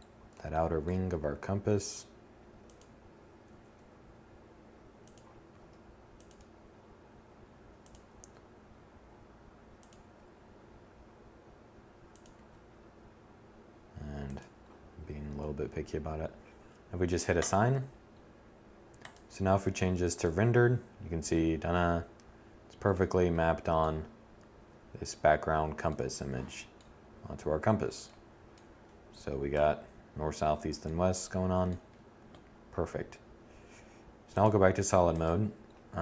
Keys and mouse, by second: 0.4 g, 2.6 s, 4.2 click, 4.6 f, 5.4 g, 7.3 s, 9.1 g, 11.2 click, 11.4 s, 13.3 click, 28.6 7.